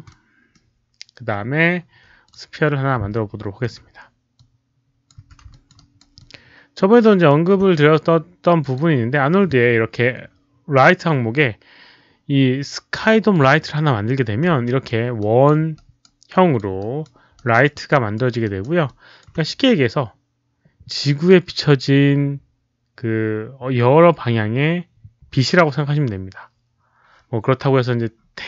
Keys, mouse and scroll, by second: 0.0 middle click, 2.2 click, 3.6 w, 4.3 click, 5.2 f, 5.5 alt+click, 5.7 alt+right click, 6.1 alt+click, 6.4-7.2 typing, 6.7 middle click, 7.0 alt+right click, 8.6 alt+click, 10.6-11.3 typing, 13.3 click, 14.6 alt+right click, 15.0 alt+click, 15.0 f, 15.2 alt+right click, 15.2 alt+click, 15.2 f, 15.7 alt+right click, 16.3 alt+click, 16.7 alt+right click, 17.3 alt+right click, 17.8 alt+right click, 17.9 alt+click, 18.2 alt+click, 18.4 alt+right click, 18.8 alt+click, 22.7 alt+click, 22.7 alt+right click, 22.8 alt+click, 27.7-28.4 middle drag.